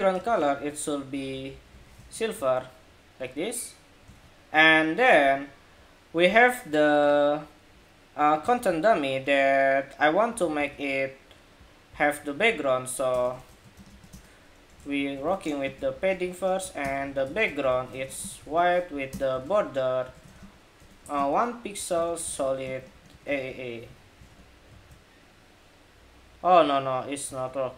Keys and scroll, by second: 1.5 super+s, 1.7 super+Tab, 2.1 super+r, 3.9 super+Tab, 10.1 super+c, 10.4 super+c, 13.2 super+v, 14.5 super+v, 23.7 super+s, 23.9 super+Tab, 24.4 super+r, 27.0 super+Tab.